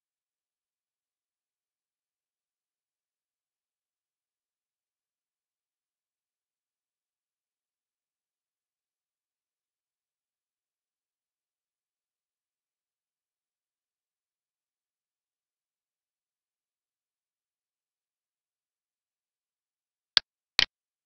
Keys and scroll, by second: 4.2 Right, 11.2 Left, 13.7 Right, 14.0 Left.